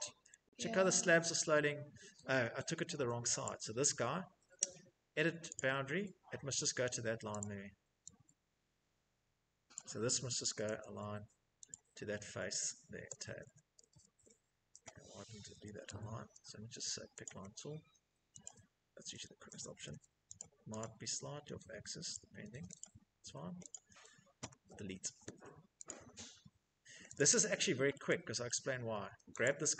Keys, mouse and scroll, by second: 0.5 shift+middle click, 1.0 middle click, 1.0 middle click, 1.1 middle click, 2.7 click, 4.8 click, 6.6 click, 9.0 click, 9.6 typing, 10.9 click, 12.2 Tab, 13.0 `, 13.5 Escape, 14.1 Escape, 14.7-15.1 typing, 17.7 click, 18.1 Escape, 18.3 Escape, 18.7-19.6 typing, 19.6 click, 20.0 click, 21.3 click, 22.0 click, 22.4 Escape, 22.9 click, 23.9 Delete, 25.1 click, 25.8-26.2 scroll, 26.4 click, 26.7 middle click, 26.7 middle click, 27.7 shift+middle click, 28.6 click.